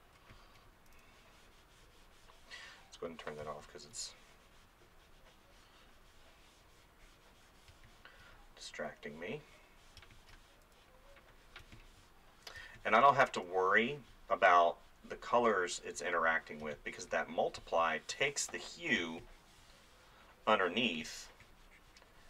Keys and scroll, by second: 0.9 [, 3.4 space, 7.7 space, 10.2 space, 11.8 space, 16.6 space.